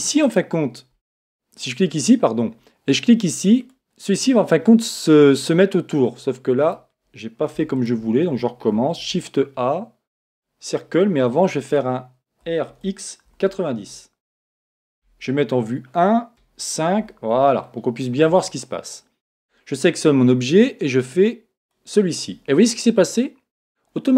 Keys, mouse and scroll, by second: 0.2-3.2 right drag, 2.9 click, 4.5-7.5 middle drag, 6.6 right click, 7.5 x, 8.9 shift+a, 11.0-12.9 middle drag, 12.4 r, 15.0 KP_1, 16.3 KP_5, 17.4-19.3 middle drag, 19.3 right click, 21.0 click.